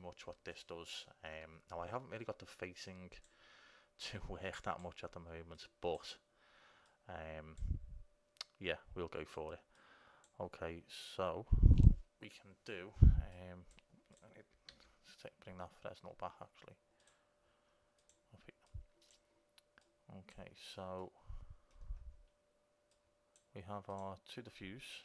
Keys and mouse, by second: 3.0-8.8 drag, 9.9-12.1 drag, 13.6-17.4 drag, 14.9 shift+a, 18.9-21.8 drag, 21.2 right click, 21.8 middle click, 23.1-24.2 drag.